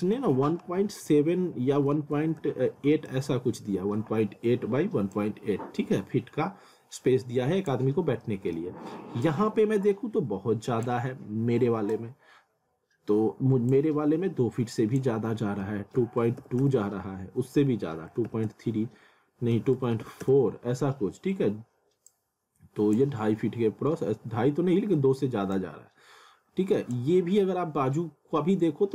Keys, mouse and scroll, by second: 5.1 click, 8.0 scroll up 1, 8.2 middle click, 9.2 click, 22.1 click, 23.2 scroll down 1, 25.6 click.